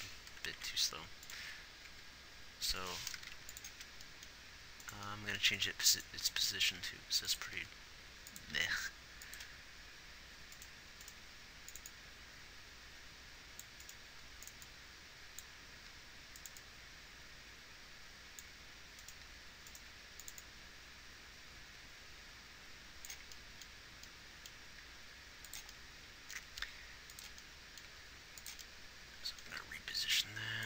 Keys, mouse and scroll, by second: 1.0 Right, 1.2 Right, 2.2 Delete, 3.9 x, 8.0 r, 9.0 g, 11.6 g, 16.2 g, 20.3 right click, 20.3 g, 25.2 g, 27.0 r, 28.3 g, 29.9 g.